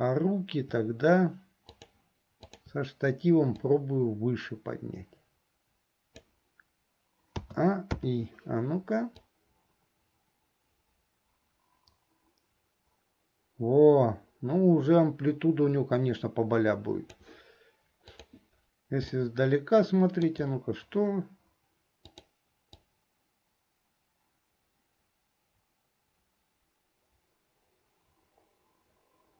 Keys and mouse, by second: 1.7 shift+click, 2.6 shift+click, 3.8-6.4 drag, 7.6 a, 9.4-17.4 drag, 18.4 click, 19.3-20.5 middle drag, 22.2 click, 23.0-29.3 drag.